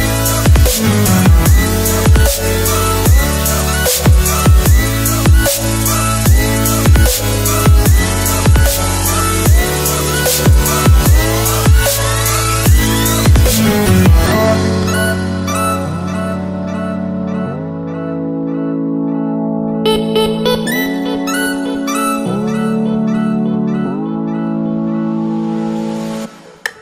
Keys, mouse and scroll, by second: 1.6 ctrl+s, 8.1 click, 12.7 click, 14.3 Delete, 15.1 click, 17.2 ctrl+s, 23.8 click.